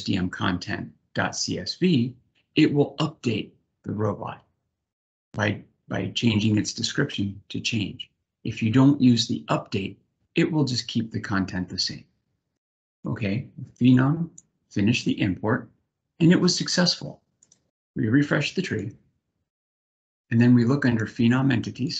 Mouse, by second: 12.8-14.0 drag, 19.6 click, 20.5 click, 21.5 click.